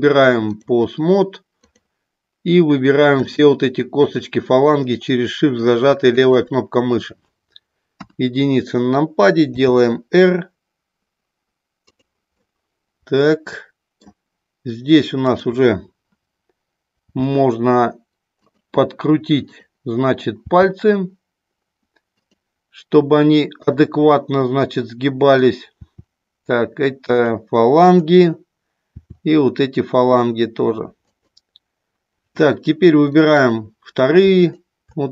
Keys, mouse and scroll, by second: 3.3 shift+click, 4.1 shift+click, 4.9 middle click, 6.3 shift+click, 7.9 KP_1, 9.5 r, 12.4-14.2 middle drag, 15.3 click, 17.1 r, 18.4 click, 19.4 click, 20.5 r, 22.2 click, 24.5 middle click, 25.9 r, 27.2 click, 27.9 click, 28.9 r, 31.0 click, 34.4 shift+click.